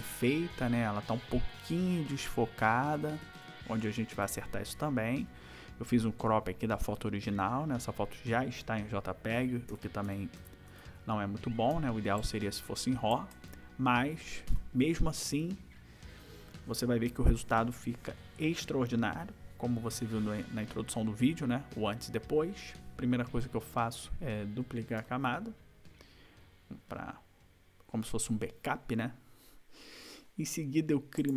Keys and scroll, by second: 1.4 ctrl+=, 3.0 ctrl+-, 9.7 ctrl+=, 14.5 ctrl+=.